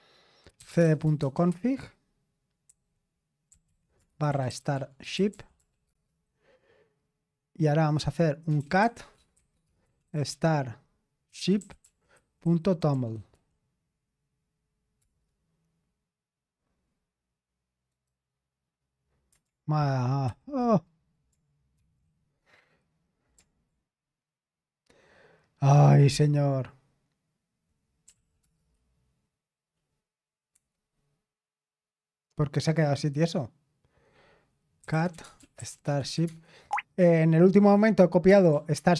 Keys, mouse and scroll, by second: 0.4-6.6 typing, 8.2-13.8 typing, 15.0 typing, 17.8 right click, 20.3 ctrl+v, 21.7 ctrl+c, 27.8-28.6 typing, 30.5 Return, 32.7 typing, 34.6-36.5 typing, 38.0-38.9 typing.